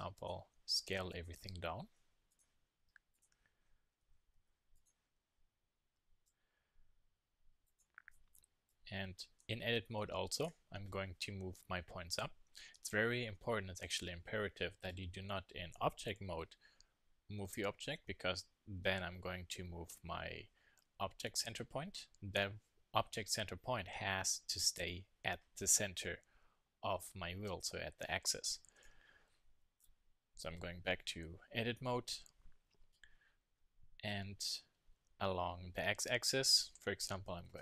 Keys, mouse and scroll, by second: 0.2-2.8 drag, 0.5 s, 1.8 s, 2.8 s, 3.9 a, 4.0 a, 4.3 s, 5.2 s, 7.7-10.4 drag, 12.7 Tab, 16.2 g, 28.7 Tab, 35.6 r.